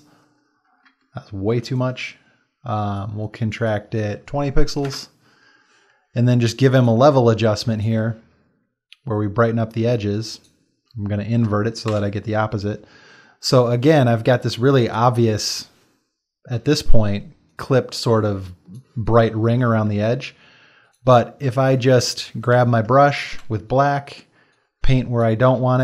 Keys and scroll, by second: 1.4 ctrl+alt+z, 4.9 Return, 11.9 ctrl+i, 14.7 ctrl+space, 21.8-23.8 typing.